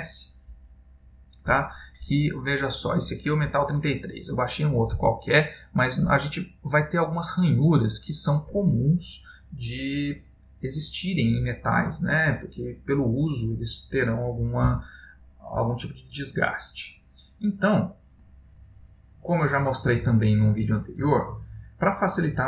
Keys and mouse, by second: 21.7 click.